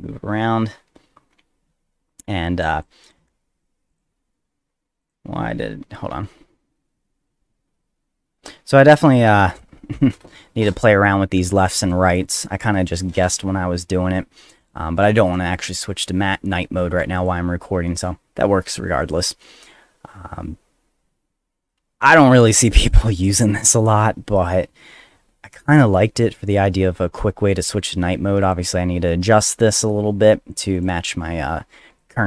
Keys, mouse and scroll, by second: 2.7 click, 3.9 click, 5.0 click, 6.1 F2, 9.5 click, 12.1 click, 14.6 click, 17.2 click, 19.0 click, 22.1 click, 22.9 click, 25.7 click, 26.5 click, 28.4 click, 29.1 click, 29.7 click, 30.2 click, 30.7 click, 31.9 click.